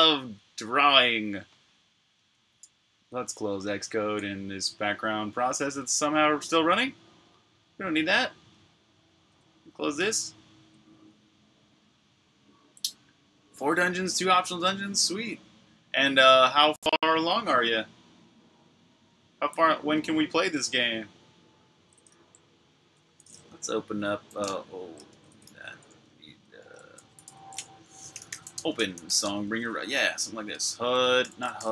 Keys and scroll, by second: 2.0 super+Tab, 9.0 super+q, 21.9 super+Tab, 24.9 shift+super+Tab, 25.3 super+w, 25.7 super+Tab, 26.8-30.6 typing.